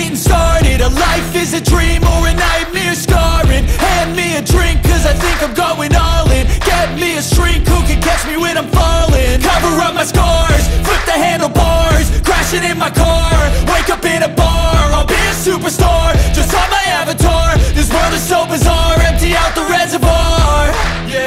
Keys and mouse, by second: 2.5 g, 8.2 Escape, 9.4 r, 12.1 Escape, 12.9 s, 15.2 Escape, 17.6 r, 19.9 Escape.